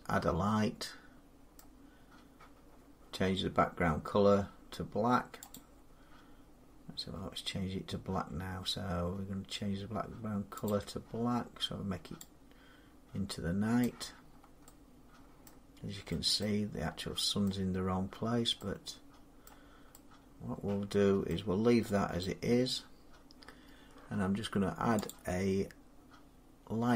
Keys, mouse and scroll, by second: 1.4 middle click, 5.4 click, 13.6 click, 14.1 scroll down 3, 15.3 middle click, 16.2 middle click, 16.6-17.0 scroll down 3, 17.3 middle click, 17.9 scroll up 4, 18.2 scroll, 19.3 middle click, 19.6 scroll, 20.7 scroll, 20.7 scroll up 5, 21.1-21.8 scroll down 1, 22.0-22.5 scroll down 1, 24.3 middle click, 24.4 scroll down 2, 24.5 middle click, 24.9 click, 24.9 scroll.